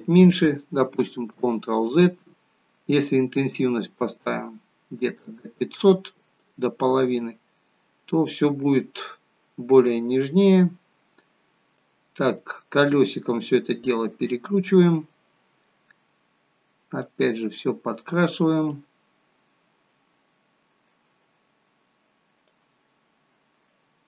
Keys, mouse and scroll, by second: 1.3 ctrl+z, 3.0 click, 7.6 click, 12.3 middle click, 14.5 click, 17.3 middle click, 19.1 click, 22.8 middle click.